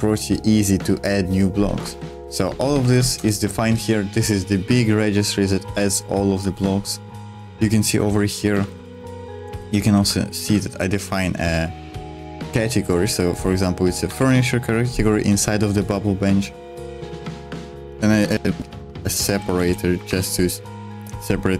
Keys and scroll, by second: 1.9-3.0 typing, 3.2 Return, 6.5-10.8 typing, 14.1 Escape, 14.3-15.4 j, 17.6-20.5 typing.